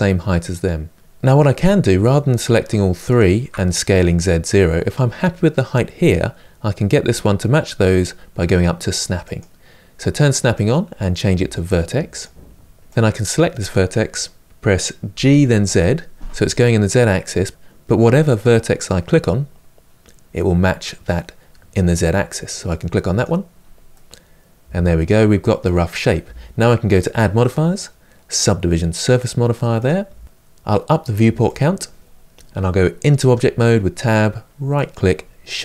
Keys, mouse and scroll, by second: 2.9 shift+click, 9.0-12.8 drag, 13.9 middle click, 14.9 g, 23.7-26.7 middle drag, 29.6 click, 31.3-33.0 drag, 33.0 Tab.